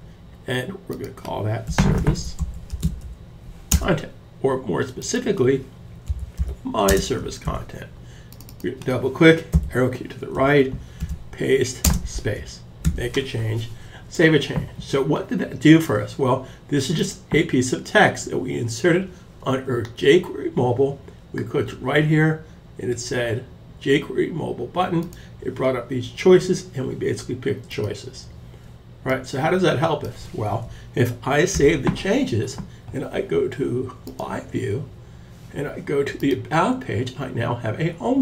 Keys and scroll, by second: 0.8-3.0 typing, 5.0-6.8 typing, 6.8 super+s, 9.0 Left, 10.4 super+v, 11.3 space, 12.3 super+s.